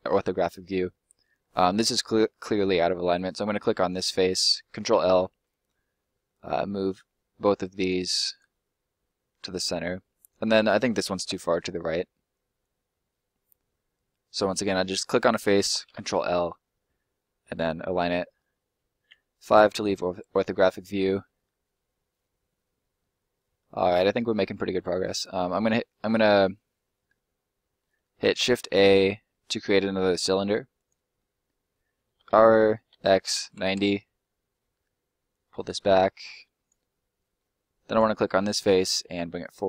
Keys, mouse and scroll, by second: 0.1-0.7 scroll up 1, 3.7 ctrl+right click, 4.5 ctrl+right click, 4.9 ctrl+l, 6.5 click, 10.2 right click, 10.7 ctrl+right click, 11.1 ctrl+l, 12.5 click, 15.0 right click, 15.8 ctrl+l, 17.2 middle click, 18.1 scroll down 1, 19.0 5, 19.8 scroll down 1, 20.1 middle click, 25.2 middle click, 27.9 shift+middle click, 28.2 shift+a, 30.7 click, 31.1 middle click, 32.1 r, 32.9 x, 33.3 9, 33.7 Return, 34.4 middle click, 35.3 click, 36.8 middle click, 37.8 right click, 38.1 middle click, 39.1 click.